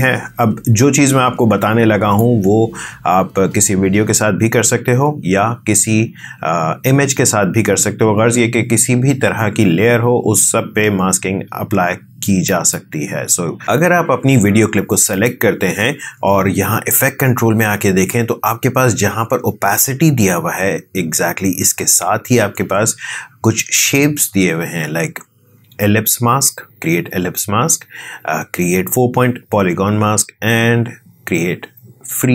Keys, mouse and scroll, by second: 12.4 click.